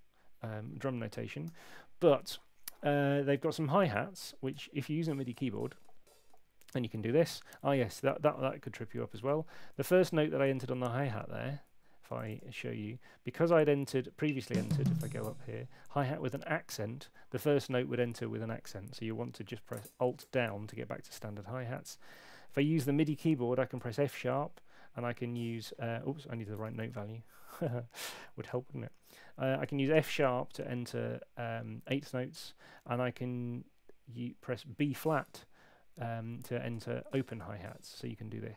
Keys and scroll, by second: 1.4 5, 7.5 super+z, 7.7 super+z, 7.9 super+z, 8.0 super+z, 8.4 super+z, 8.7 super+z, 9.1 super+z, 10.4 Return, 11.0 Up, 11.6 ↺, 13.0 Right, 19.6 alt+Down, 26.6 super+z, 26.7 super+z, 29.0 5.